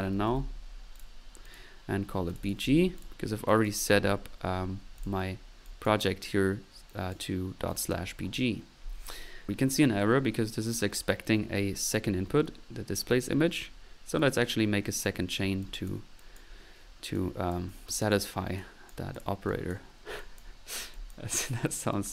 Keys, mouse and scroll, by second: 0.0-0.9 typing, 2.8 drag, 3.5 click, 4.0 middle click, 4.5 middle click, 5.0 click, 5.3 middle click, 6.0 middle click, 6.9-8.1 drag, 8.2 middle click, 9.5 click, 14.2 click, 15.0 click, 15.6 click, 16.2 click, 16.6 drag, 17.2 click, 17.7 right drag, 17.8-18.1 drag, 18.1 right drag, 18.6 right click, 19.1 click.